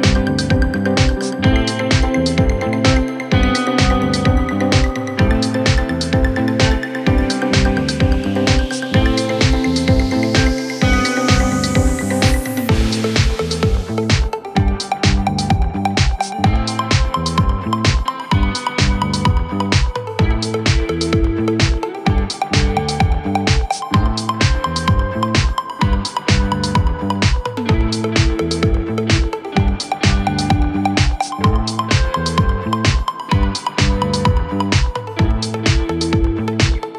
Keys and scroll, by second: 0.0-0.3 typing, 2.9-3.6 typing, 6.6-7.4 typing, 26.3 5, 27.6 0, 32.2 typing, 35.3 typing.